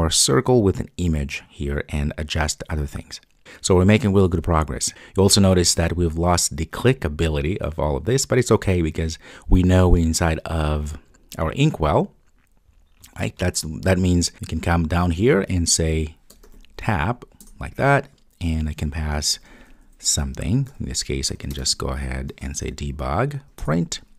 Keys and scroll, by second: 17.5 Return, 23.7 Return.